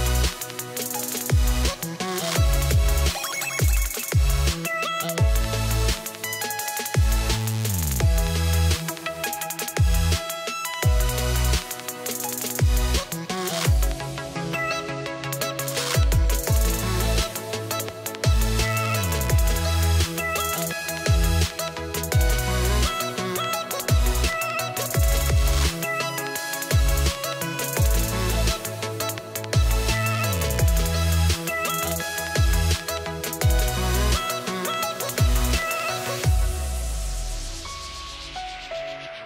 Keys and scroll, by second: 10.3 space, 11.6 ctrl+v, 16.0 BackSpace, 19.8 ctrl+a, 35.3 ctrl+v, 37.7 BackSpace, 39.1 BackSpace.